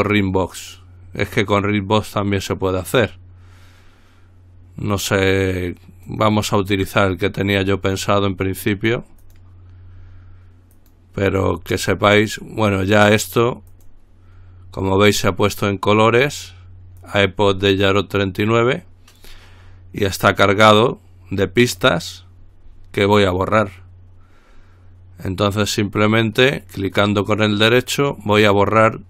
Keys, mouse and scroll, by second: 6.3 click, 9.4 click, 11.0 click, 13.9 click, 17.2 click, 26.2 right click.